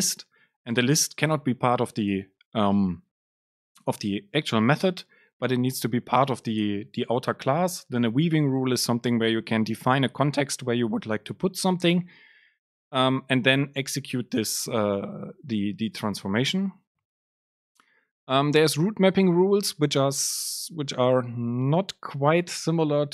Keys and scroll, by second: 12.0 Return.